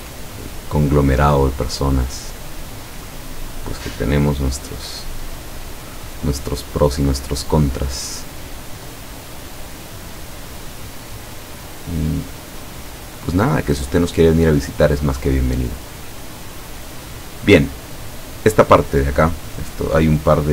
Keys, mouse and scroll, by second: 2.7 click, 3.8 click, 4.3-5.8 drag, 8.0-10.2 drag, 11.8-13.4 drag, 16.1 middle click, 18.0 click.